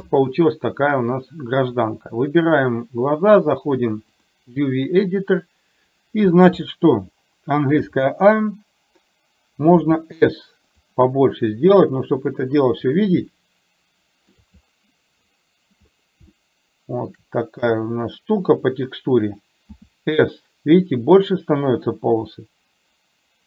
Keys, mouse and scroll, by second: 1.7 click.